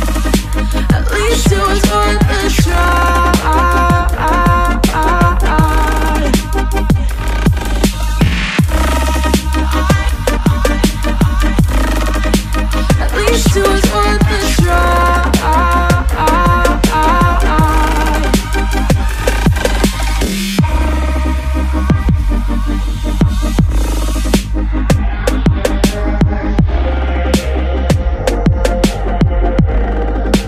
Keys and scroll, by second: 1.3 ctrl+=, 4.0 ctrl+=, 10.3 ctrl+z, 17.2 p, 18.8 p, 26.6 Up, 26.7 Down, 28.0 ctrl+-, 28.2 ctrl+0, 28.6 ctrl+=.